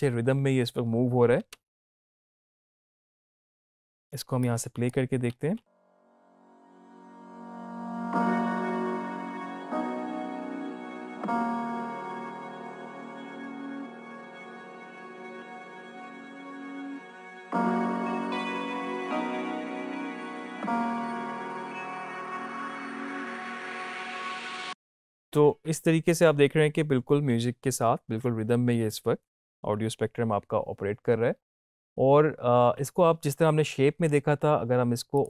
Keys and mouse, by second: 1.4-3.6 drag, 4.0 space, 4.7-6.5 drag, 24.3 space.